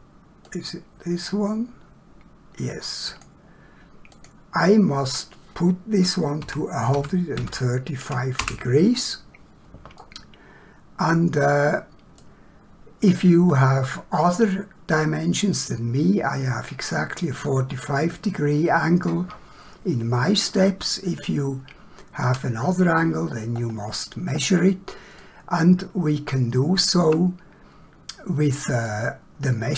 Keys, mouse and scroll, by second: 0.4 click, 4.1 click, 6.4 1, 6.9 3, 7.4 5, 8.4 Return, 10.0 middle click, 13.4 middle click, 20.3 middle click, 23.6 middle click, 23.7-24.4 scroll up 1, 25.2 shift+middle click, 28.9 shift+middle click.